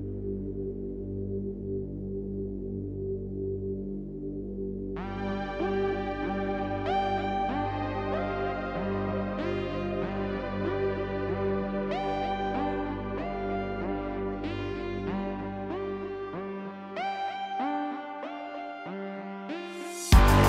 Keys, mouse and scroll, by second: 0.9 scroll down 4, 1.0 middle click, 1.6 shift+a, 4.9 click, 5.5 click, 6.1 shift+a, 8.5 click, 9.3 middle click, 9.4 scroll up 2, 9.7-12.1 drag, 12.5-17.4 drag, 17.4 scroll down 2, 17.6-19.4 middle drag, 19.4 shift+a.